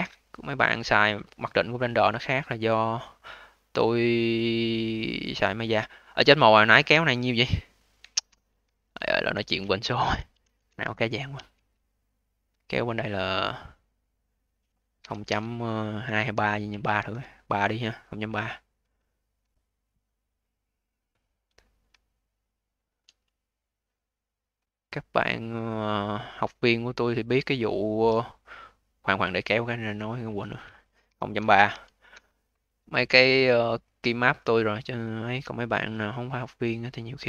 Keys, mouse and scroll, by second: 0.0 alt+middle click, 0.6-1.8 alt+drag, 8.0 ctrl+z, 8.6-8.9 scroll down 2, 8.9 alt+click, 9.6 alt+middle click, 10.0 ctrl+z, 10.3 ctrl+z, 10.6 ctrl+z, 11.3 ctrl+z, 12.4 click, 14.0-17.0 drag, 18.3 alt+click, 18.9 alt+middle click, 19.6 click, 20.3 click, 21.5 alt+middle click, 22.3 shift+click, 23.3-24.5 alt+drag, 24.5 alt+middle click, 25.0-26.8 alt+drag, 26.8-28.4 alt+middle drag, 28.4 click, 30.0-33.0 drag, 33.7-34.3 alt+middle drag, 34.3-37.2 alt+drag.